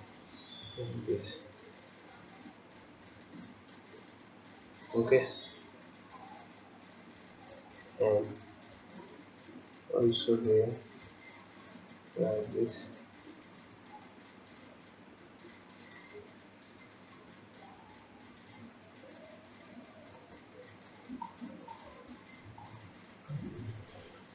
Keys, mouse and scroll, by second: 5.2-6.2 scroll down 7, 6.2 scroll down 4, 7.6-8.3 scroll down 1, 8.3 scroll up 1, 9.1 shift+click, 20.4-20.8 scroll down 4, 20.8-21.3 scroll up 4, 21.3 shift+middle click, 22.6 shift+click.